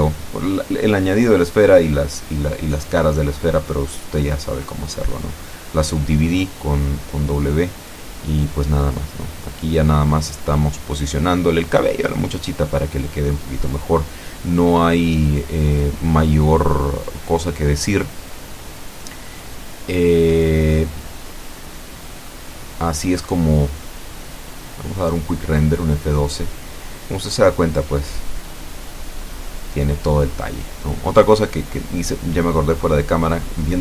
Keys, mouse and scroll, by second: 1.5 click, 2.9 click, 5.0-6.2 drag, 6.9 click, 8.8-9.9 drag, 10.2 middle click, 10.8-11.2 scroll down 1, 11.2 middle click, 12.1-12.4 scroll up 1, 12.4 middle click, 13.3 scroll up 1, 13.7 middle click, 14.6-15.4 scroll down 2, 15.4 middle click, 16.3-16.6 scroll down 2, 18.0 F12, 18.9 scroll down 2, 20.1 middle click, 21.2-21.5 scroll down 1, 31.0 Escape, 31.4-31.8 scroll up 1, 32.0 right click.